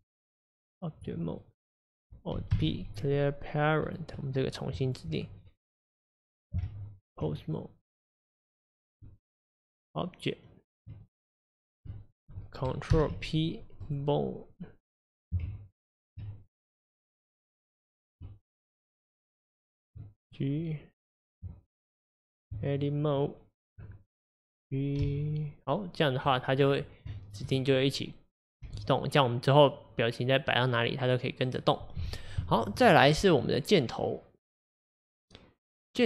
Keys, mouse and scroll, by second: 1.0 Tab, 1.5 click, 3.9 alt+p, 4.2 click, 7.3 Tab, 7.5-10.9 drag, 10.9 Tab, 11.1 click, 13.9 ctrl+p, 14.6 click, 16.2 Tab, 16.4-17.9 drag, 20.0 Tab, 20.3 click, 23.8 Tab, 24.3 click, 25.0 g, 26.6-27.2 scroll down 1, 27.2-28.7 shift+middle drag, 28.7 g, 32.0-32.5 scroll up 3, 32.5-32.9 shift+middle drag, 32.9-33.3 scroll up 1, 33.3 click, 35.9-36.0 drag.